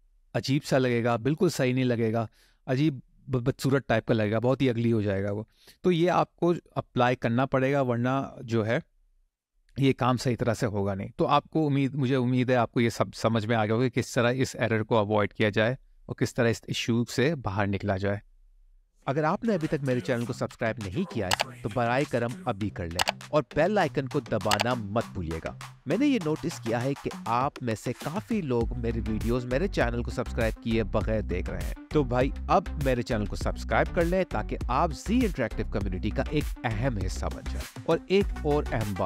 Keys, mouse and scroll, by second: 20.3 middle click.